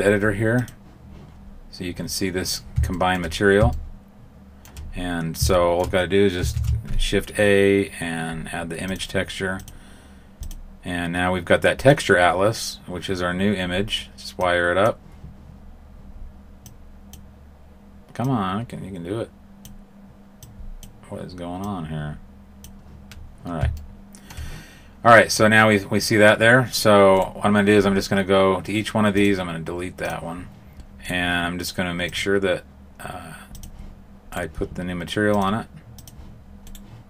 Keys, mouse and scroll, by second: 2.9 shift+middle click, 3.7 shift+middle click, 4.8 scroll up 2, 5.5 shift+middle click, 6.4 shift+a, 10.4 click, 14.3 click, 16.6 click, 18.7 click, 20.8 click, 22.6 click, 23.7 shift+middle click, 27.1 right click, 29.1 click, 30.0 click, 31.0 right click, 32.0 click, 34.3 right click, 35.3 click, 36.6 right click.